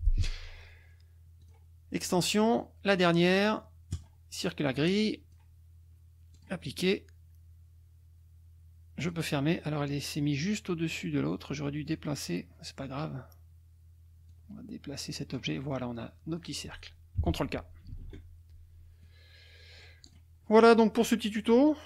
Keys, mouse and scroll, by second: 1.4 click, 3.9 click, 5.0 click, 6.3 click, 9.0 click, 11.9 click, 14.3-15.5 drag, 15.7 click, 17.9 ctrl+k, 19.0 click, 20.0 click.